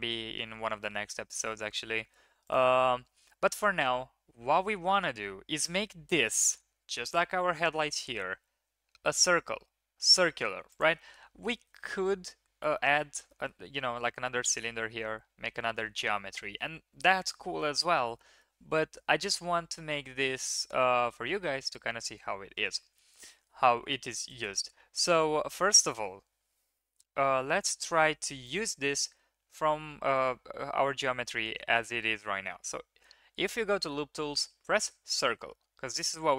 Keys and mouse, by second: 2.6 Tab, 13.1 Tab, 13.3 drag, 22.5 Tab, 23.7 3, 24.2 click, 25.1 KP_1, 26.4 KP_3, 27.4 ctrl+KP_3.